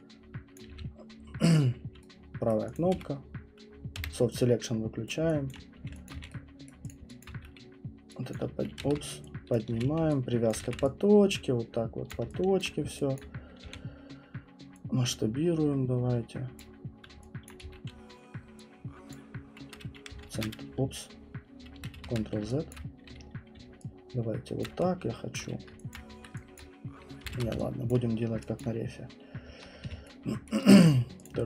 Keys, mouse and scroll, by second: 0.5 click, 0.7 f, 1.0 middle click, 2.5 right click, 2.7 click, 2.9 w, 3.9 b, 5.1 click, 5.5 alt+click, 5.7 middle click, 5.8 middle click, 5.9 middle click, 6.1 alt+click, 6.2 q, 6.7 right click, 6.9 click, 7.2 alt+click, 7.3 w, 8.3 click, 8.8-12.6 typing, 9.5 click, 10.5 click, 12.1 click, 12.6 alt+click, 13.1 click, 13.6 r, 16.6 click, 17.5 click, 17.7 w, 19.1 click, 20.2 ctrl+x, 21.9 ctrl+z, 22.7 alt+click, 23.5 alt+right click, 23.5-24.6 typing, 24.6 click, 25.9 click, 26.5 click, 27.3 ctrl+z, 27.9 click, 28.6 click, 29.8 click, 29.8 q, 30.5 right click, 31.2 click.